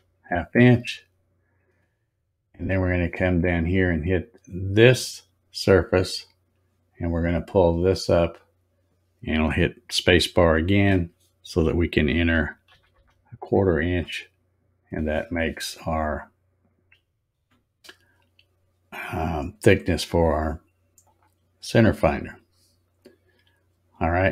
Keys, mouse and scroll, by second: 6.0 click, 7.8-10.6 drag, 10.6 space, 21.0 click, 22.8 click.